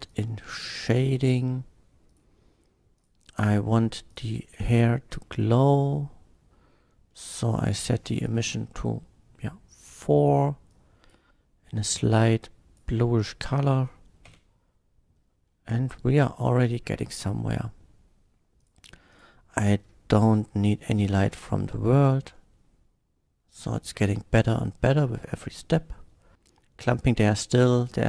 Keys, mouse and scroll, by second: 0.1 click, 0.8 click, 2.1 click, 2.9 click, 4.1 click, 5.2 middle click, 5.6 middle click, 7.1 middle click, 7.7 click, 8.3 KP_4, 8.5 Return, 9.7 click, 10.7-11.1 drag, 11.9-12.8 drag, 13.1-13.6 middle drag, 14.3 F12, 17.2 click, 18.6 click, 19.1 click, 19.5 middle click, 20.6 click, 21.2 KP_0, 21.3 Return, 22.0 click, 22.4-23.2 middle drag, 23.7 middle click, 24.5 click.